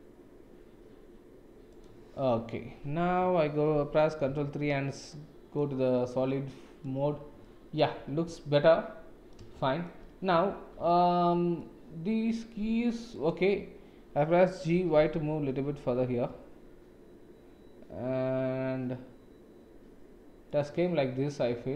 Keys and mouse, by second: 2.7 Tab, 4.2 ctrl+3, 4.4 shift+z, 4.9-5.5 drag, 6.3-6.8 drag, 7.4 click, 8.3-9.3 middle drag, 9.5-9.9 shift+middle drag, 10.6 ctrl+s, 10.8 middle click, 13.1 click, 14.7 g.